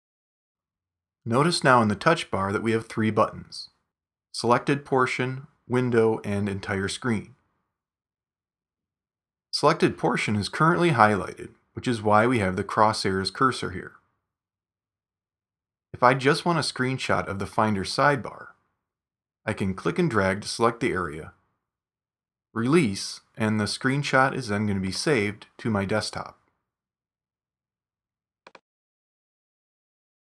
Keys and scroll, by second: 25.1 space, 27.5 space, 29.9 shift+super+4.